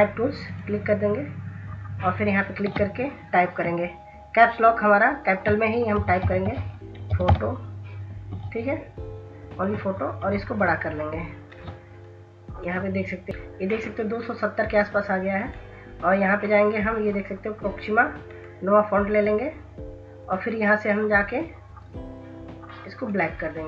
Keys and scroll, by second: 6.0-8.1 typing.